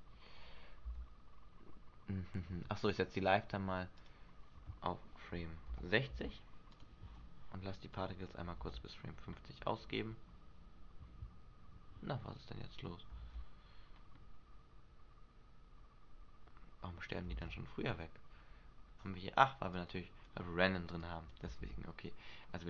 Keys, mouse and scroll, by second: 1.1 Left, 4.1 click, 8.1 click, 8.7 alt+a, 11.9 Escape, 13.4 alt+a, 17.5 alt+a, 18.6-19.0 scroll down 1, 19.0 scroll up 1, 19.9 click, 21.2 click, 21.7 alt+a.